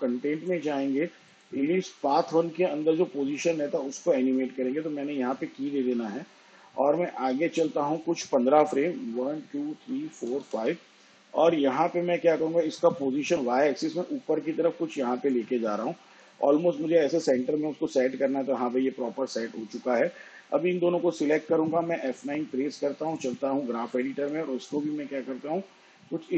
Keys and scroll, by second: 8.9 shift+Page_Down, 10.8 ctrl+Right, 23.7 F9.